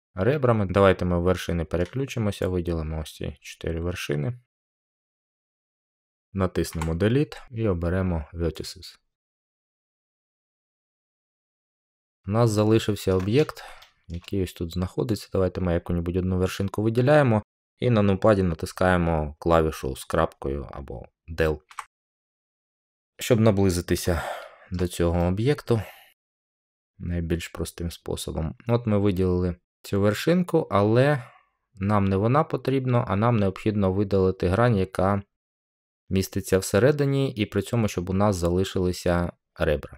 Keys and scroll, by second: 6.6 Delete, 21.6-22.2 scroll.